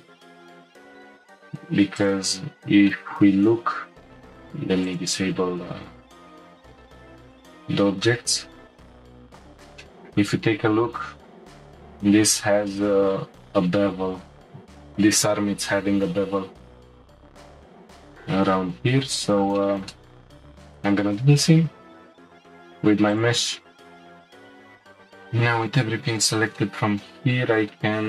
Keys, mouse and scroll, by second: 0.9 click, 2.0 click, 2.9-4.3 shift+middle drag, 4.3 click, 6.4 Tab, 7.2 click, 9.1 scroll down 1, 9.1 click, 9.8-10.3 shift+middle drag, 10.3-10.9 scroll up 1, 10.9-13.9 shift+middle drag, 16.7-18.3 drag, 18.3-19.1 scroll down 2, 19.1-20.5 middle drag, 20.5 click, 21.5 Tab, 22.1-23.1 scroll down 1, 23.1 alt+shift+click, 23.8 alt+shift+click, 24.3 middle click, 24.6 alt+shift+click, 25.2-28.0 middle drag.